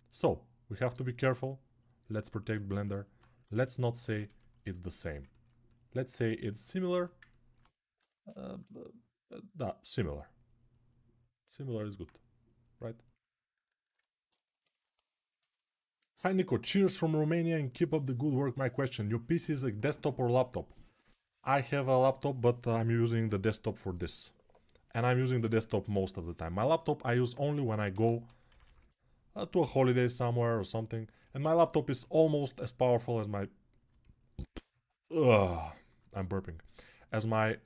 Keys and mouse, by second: 3.2 ctrl+Tab, 4.0-5.0 alt+shift+right drag, 5.0 ctrl+alt+click, 5.9 ctrl+alt+right click, 6.7 alt+q, 7.8 g, 11.8-34.9 drag, 27.7 g, 28.3 ], 28.4 ].